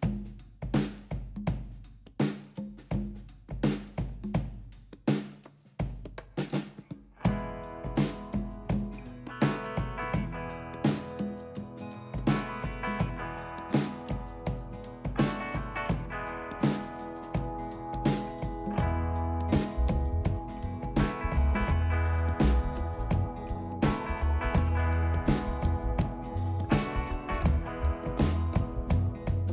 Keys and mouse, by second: 0.0 alt+shift+click, 0.4 middle click, 1.1 ctrl+KP_Add, 1.5-2.5 middle drag, 2.8 ctrl+KP_Subtract, 3.3-4.4 middle drag, 5.2 shift+click, 5.4 shift+click, 5.9 middle click, 6.3 shift+click, 6.6 middle click, 7.4 shift+click, 7.6 shift+click, 7.9 shift+click, 8.3 middle click, 8.8 middle click, 11.0 shift+click, 11.8 ctrl+click, 12.4 ctrl+z, 13.3 ctrl+click, 13.7 ctrl+click, 14.8 ctrl+middle click, 15.0 middle click, 16.0 shift+click, 16.5 ctrl+click, 17.7 ctrl+click, 18.3 middle click, 18.8 shift+click, 19.2 middle click, 20.4 shift+click, 20.7 middle click, 21.3 ctrl+middle click, 21.5 middle click, 22.5 ctrl+click, 23.2 ctrl+z, 23.7 shift+click, 24.4 middle click, 25.3 ctrl+click, 26.1 middle click, 27.0 middle click, 28.5 shift+click, 29.1 shift+click, 29.3 shift+click.